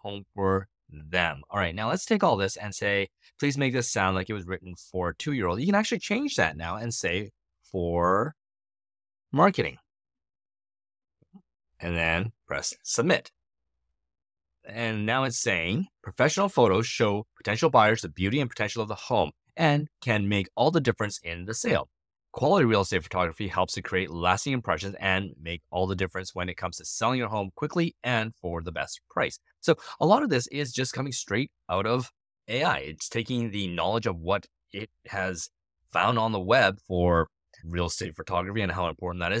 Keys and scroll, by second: 5.9 Right, 6.9 Right, 7.9-10.3 typing, 14.9 Return.